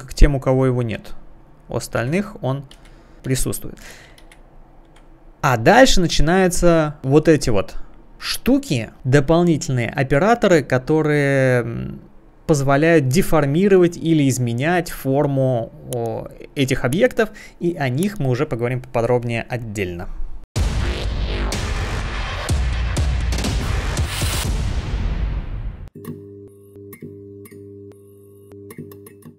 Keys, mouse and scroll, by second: 2.0 ctrl+z, 4.2 ctrl+z, 4.8 click, 5.1 click, 6.1 click.